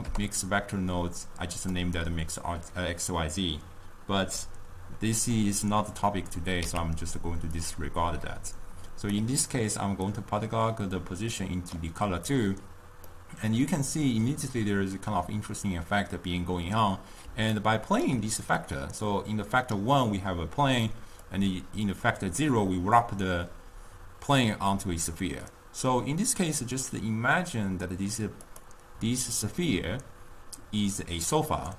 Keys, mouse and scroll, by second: 6.7 x, 7.8 click, 10.5-13.8 drag, 13.8-16.3 middle drag, 17.5 d, 17.8 right click, 18.2 d, 18.5 d, 19.1-24.8 drag, 26.5-29.0 drag.